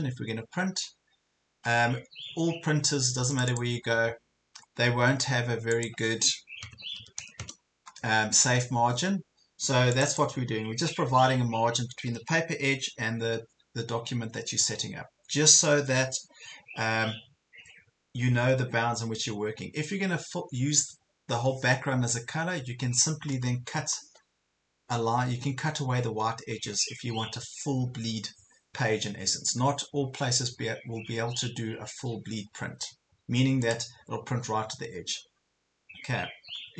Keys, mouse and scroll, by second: 3.3 click, 7.0 KP_1, 7.2 KP_0, 10.1-11.1 drag.